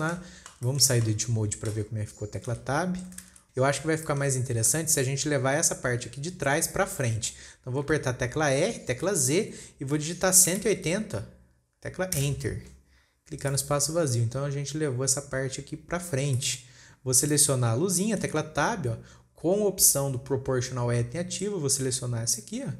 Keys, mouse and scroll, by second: 0.4-3.0 shift+middle drag, 3.0 Tab, 3.7-4.3 shift+middle drag, 4.3 scroll down 1, 4.5-4.9 shift+middle drag, 4.9 scroll up 1, 8.4 r, 13.9 click, 14.5-15.5 scroll up 2, 16.8 shift+middle click, 17.6 click, 18.8 Tab, 21.8 click.